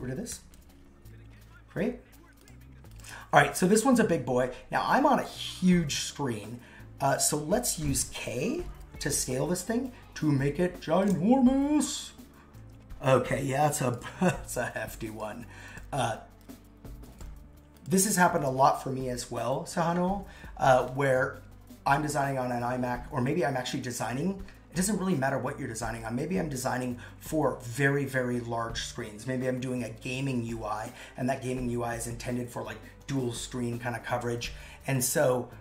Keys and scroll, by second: 0.5 super+v.